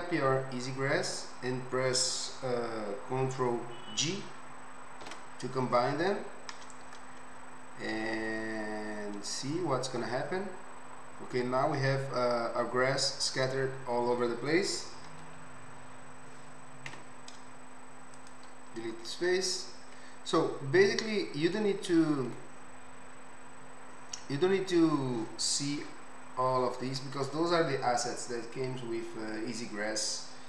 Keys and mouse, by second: 15.7 l, 17.5 x, 27.8-30.4 right drag.